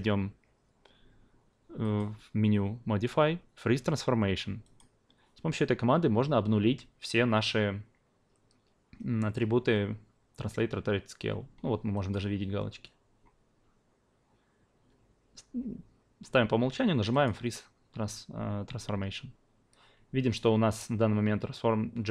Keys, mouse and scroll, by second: 1.8-4.7 drag, 12.1-17.2 drag.